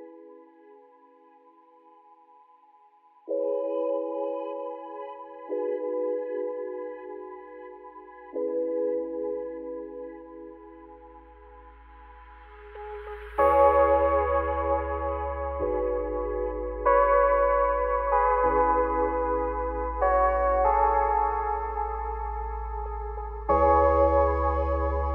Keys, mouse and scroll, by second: 2.9 click, 3.9 click, 6.1 click, 6.5-9.4 middle drag, 9.4 click, 9.9 click, 10.3-11.2 middle drag, 11.2 click, 11.4 scroll down 1, 11.5 middle drag, 11.7 scroll up 1, 11.9 ctrl+z, 13.0-13.6 middle drag, 13.6 ctrl+shift+z, 13.9-14.9 middle drag, 14.9 ctrl+s, 15.1-16.2 middle drag, 16.2 click, 16.6-17.0 middle drag, 17.0 `, 17.5-18.1 scroll up 3, 18.1-20.2 shift+middle drag, 20.2 shift+right click, 20.7 shift+a.